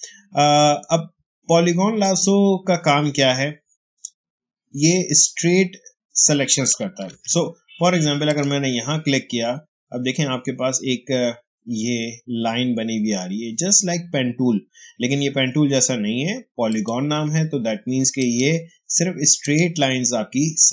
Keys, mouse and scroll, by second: 7.0 ctrl+d, 8.2 click, 16.6 click.